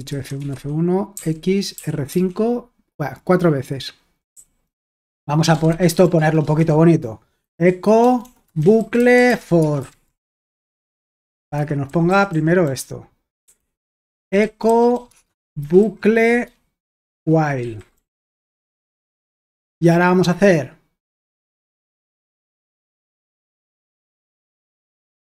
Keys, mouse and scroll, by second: 0.0-2.1 typing, 4.3-19.5 typing, 11.6 Escape, 21.2 y, 22.5-23.5 typing.